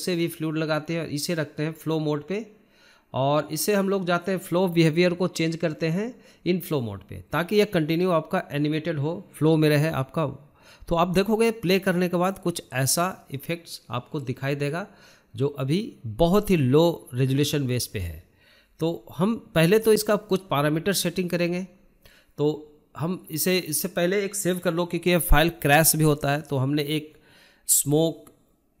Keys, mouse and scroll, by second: 0.2 scroll up 1, 0.4-2.0 shift+middle drag, 2.0 click, 2.4-4.7 shift+middle drag, 4.7 click, 5.2-6.2 shift+middle drag, 6.2-8.6 drag, 8.6-10.7 shift+middle drag, 10.7-12.6 drag, 12.7-14.9 shift+middle drag, 14.9-21.5 drag, 21.5 scroll down 2, 21.7-22.5 middle drag, 22.5 scroll up 1, 22.7-24.7 shift+middle drag, 24.7 click, 25.1 shift+middle click, 25.5 scroll up 1, 25.6-26.7 shift+middle drag, 27.3-28.8 drag.